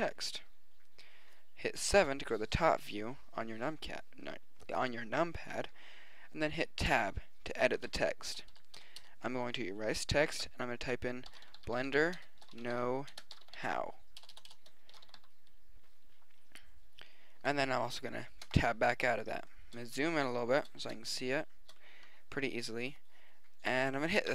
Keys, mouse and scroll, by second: 1.9 KP_7, 6.9 Tab, 8.3 BackSpace, 8.5 BackSpace, 8.8 BackSpace, 9.0 BackSpace, 11.3-15.1 typing, 18.4 Tab.